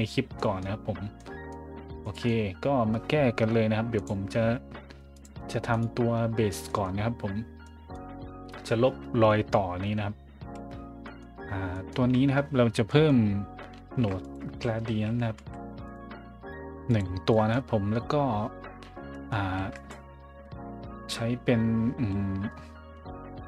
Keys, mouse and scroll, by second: 0.4 middle drag, 1.2 middle drag, 2.0 middle click, 3.9 click, 5.1 click, 5.7 right click, 6.7 middle click, 7.0 scroll down 1, 7.6 scroll up 1, 10.4 a, 11.0 middle click, 11.4 middle click, 11.7 middle click, 12.2 scroll up 1, 12.8 scroll up 1, 13.9-15.9 typing, 14.2 click, 15.9 click, 16.8 click, 17.3 middle click, 19.1 middle click, 19.6 shift+a, 19.7 click.